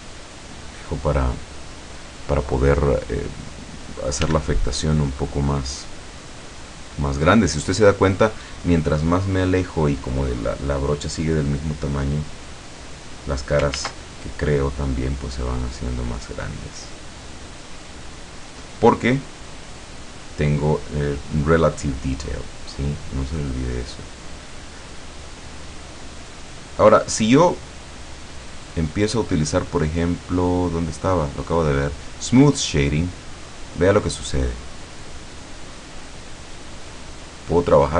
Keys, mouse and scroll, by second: 4.3 f, 5.1 click, 5.7-7.3 drag, 9.1-9.6 scroll down 2, 12.5 click, 13.8 ctrl+z, 14.3-14.8 ctrl+scroll up 3, 15.7-17.1 drag, 18.0 click, 19.2-19.9 scroll down 1, 20.1 scroll down 1, 22.8 click, 24.8 click, 25.2 click, 25.8-27.9 drag, 28.0 click, 32.5 click, 34.6 middle click, 35.9-37.9 drag.